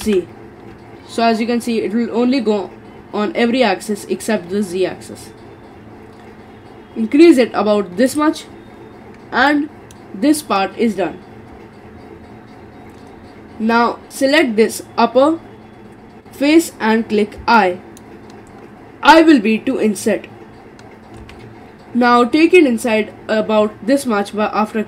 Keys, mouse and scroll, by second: 9.5-12.5 middle drag, 14.1 click, 17.6-20.7 middle drag, 21.2 i.